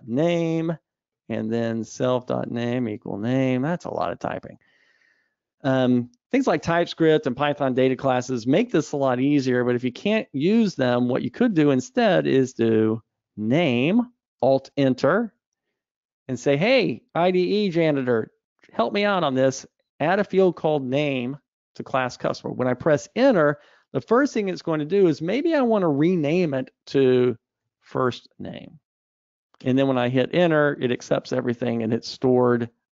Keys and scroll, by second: 11.0 super+z, 14.7 alt+Return.